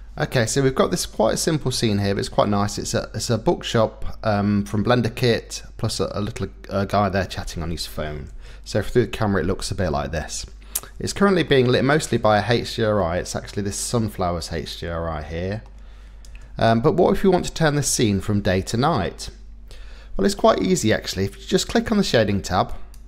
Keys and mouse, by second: 0.9-2.2 drag, 8.4 KP_0, 11.4 middle click, 13.0 middle click, 14.1-15.7 middle drag, 16.3 KP_0.